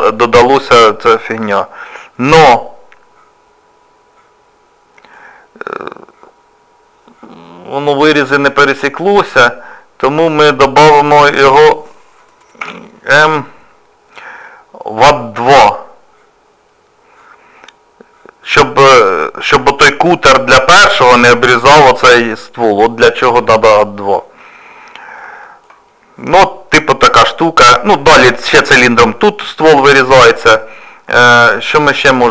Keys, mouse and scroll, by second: 8.0 middle click, 12.6 m, 17.2 middle click, 18.8-19.6 scroll down 2, 19.6 shift+middle click, 22.3 middle click, 23.7 middle click, 24.4-25.1 scroll down 3, 24.8-25.1 scroll up 1, 25.2-25.7 scroll down 2, 25.4 shift+middle click, 25.7 scroll up 2, 25.9 middle click, 29.5 middle click, 30.8 scroll up 1, 30.8 scroll down 1, 31.3 shift+middle click, 31.7 scroll up 2, 31.9 scroll down 1.